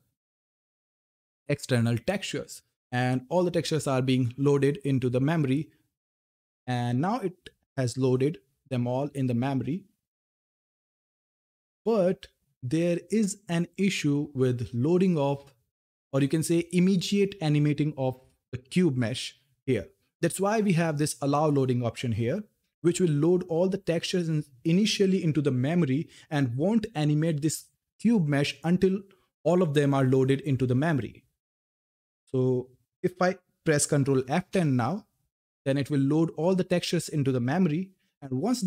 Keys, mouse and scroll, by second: 22.3 click, 22.3 click, 33.0 ctrl+Num_Lock, 34.1 ctrl+F10.